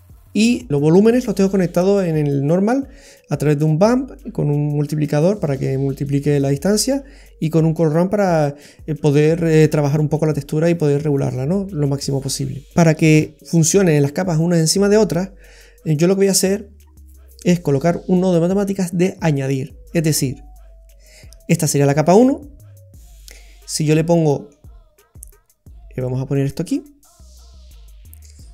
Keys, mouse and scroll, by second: 0.1 middle click, 12.2-12.6 scroll up 2, 12.6 middle click, 13.1 shift+a, 23.8-24.1 scroll up 4, 24.1 middle click, 25.2 click.